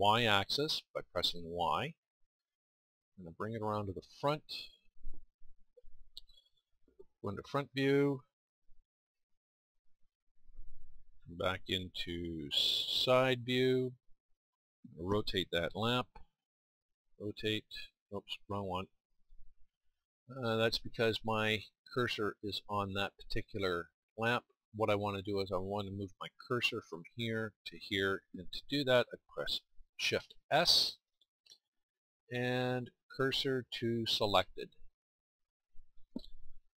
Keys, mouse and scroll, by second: 16.8 middle click, 16.9 r, 18.1 middle click, 18.4-23.7 drag, 23.7-35.3 middle drag.